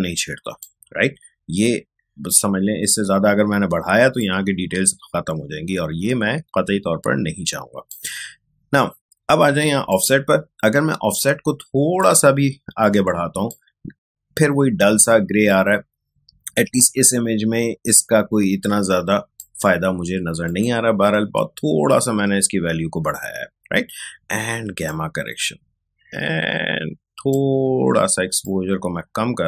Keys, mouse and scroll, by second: 4.2-12.0 drag, 12.0-20.4 drag, 21.1-22.0 scroll up 1, 24.8-29.4 drag.